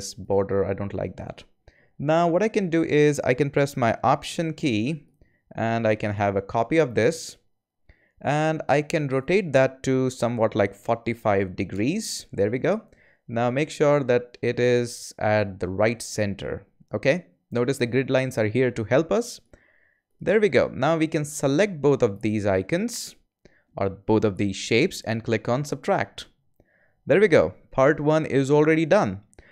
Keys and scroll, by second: 10.6-11.5 typing, 11.7 Return.